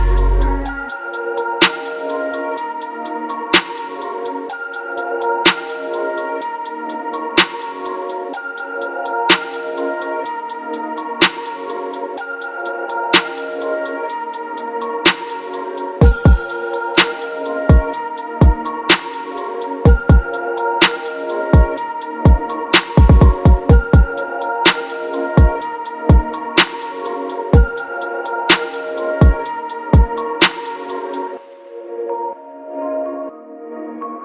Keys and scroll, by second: 1.4 ctrl+z, 4.6 ctrl+z, 8.0 ctrl+z, 11.2 ctrl+z, 12.5 ctrl+z, 18.9 ctrl+z, 19.1 ctrl+z, 19.5 typing, 24.6 ctrl+z, 25.1 ctrl+d, 27.7 ctrl+z, 28.0 ctrl+KP_Add, 28.3 space, 28.8 [, 29.8 space, 30.3 space, 33.3 space.